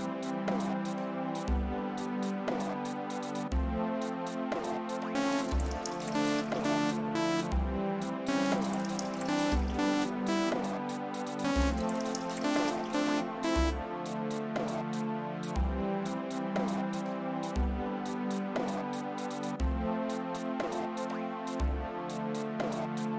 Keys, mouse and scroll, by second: 1.2 click, 4.6 click, 5.1 space, 7.8 space, 10.4 space, 11.4 space, 13.6 space, 15.0-16.1 drag, 18.5 click.